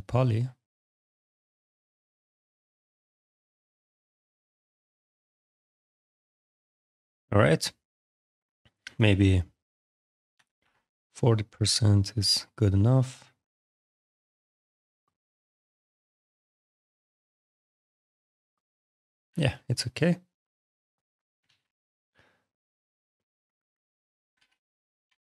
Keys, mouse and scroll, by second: 1.2 click, 4.3 click, 6.0 click, 7.1 click, 8.6 click, 10.2 4, 10.4 0, 10.8 Return, 11.4 click, 16.9 click, 17.3 alt+click, 19.1 f, 19.7 click, 21.3 alt+x, 21.9 click, 24.2 ctrl+v, 24.9 Return.